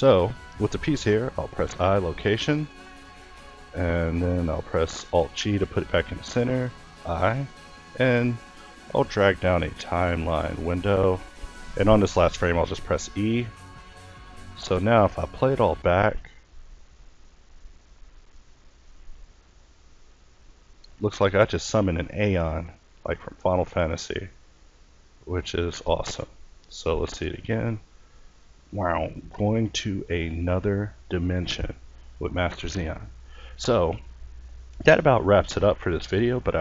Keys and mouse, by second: 0.6 |, 4.2 alt+g, 5.6 i, 7.5-12.0 drag, 12.0 e, 15.2 alt+a, 20.8-22.0 middle drag.